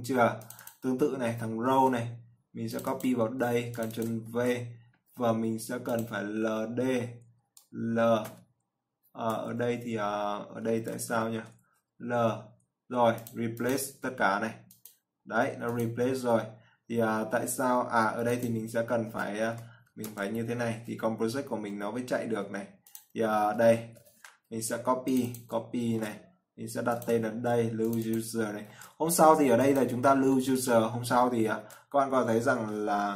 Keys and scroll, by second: 1.9 ctrl+c, 3.6 ctrl+v, 26.3 ctrl+c, 27.6 ctrl+v, 29.0 ctrl+c, 30.4 ctrl+v, 31.4 ctrl+s.